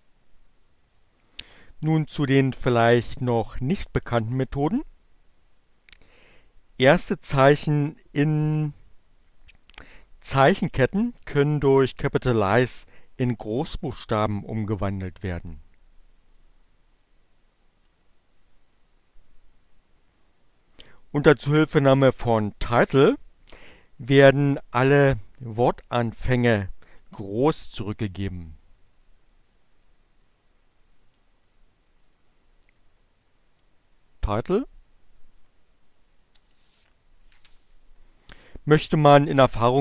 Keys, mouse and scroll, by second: 15.7-18.1 drag, 29.8-30.9 drag, 32.3-33.5 drag.